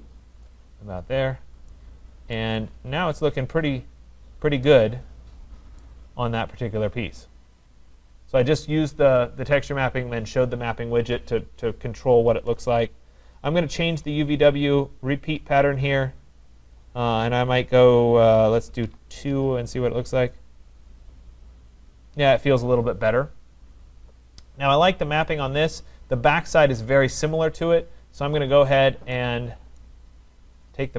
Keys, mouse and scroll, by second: 1.0-1.4 scroll, 2.6 middle click, 2.6 right click, 2.9 middle click, 3.0 middle click, 5.8 right click, 8.7 right click, 14.1 click, 14.8-17.0 drag, 18.8 typing, 19.3 Return, 23.5 Return, 25.3-28.3 scroll, 28.5 click, 29.8 right click, 30.8 click.